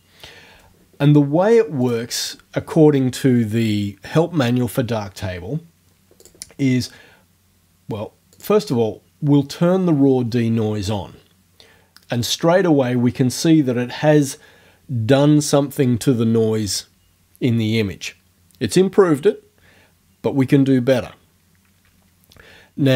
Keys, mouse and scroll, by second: 1.8 click, 6.2 click, 8.4 click.